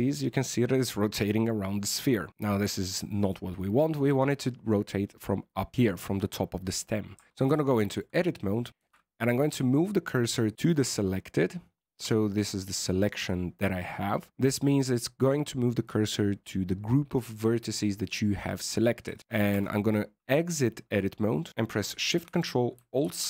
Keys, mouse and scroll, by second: 2.3 scroll up 3, 2.8 shift+middle click, 7.1 Tab, 7.7 shift+middle click, 8.4-8.7 scroll up 4, 8.7 shift+s, 10.9 middle click, 13.5-13.8 scroll down 2, 13.8 middle click, 19.0 KP_1, 19.5 Tab, 20.1-21.4 scroll up 4, 23.0 ctrl+alt+shift+c.